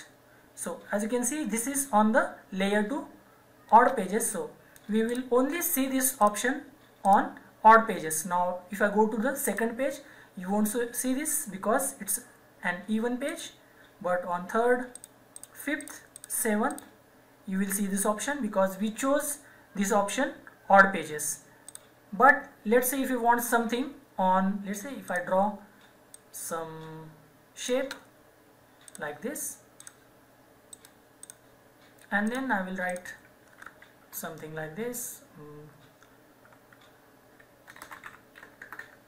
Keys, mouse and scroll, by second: 5.1 click, 9.4 click, 13.2 click, 21.6 click, 25.0 click, 30.7 right click, 31.2 click, 37.5-39.0 typing.